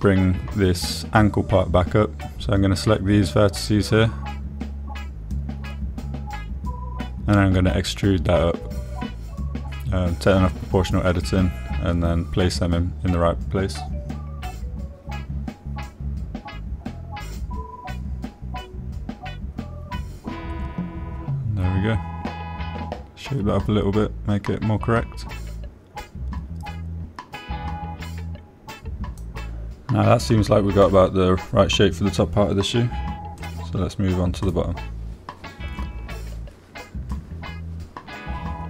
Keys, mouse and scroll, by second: 0.6 shift+middle click, 3.2 click, 5.1 click, 7.1 click, 7.9 shift+click, 8.9 shift+click, 9.8 e, 10.7 click, 11.3 g, 12.0 middle click, 15.3 click, 16.0 click, 16.8 g, 17.6 click, 18.7 click, 22.2 click, 22.9-24.5 middle drag, 25.3 middle click, 27.4-29.3 middle drag, 30.1 middle click, 31.4-34.0 middle drag, 34.9 click, 37.9 shift+middle click.